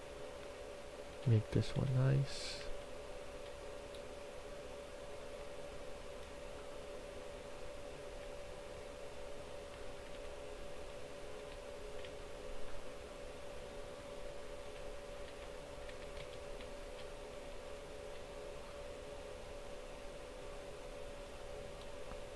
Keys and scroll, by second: 0.0-1.0 typing, 2.2-3.3 typing, 7.7 w, 9.2-11.9 typing, 13.6-14.5 typing, 15.9-17.2 typing.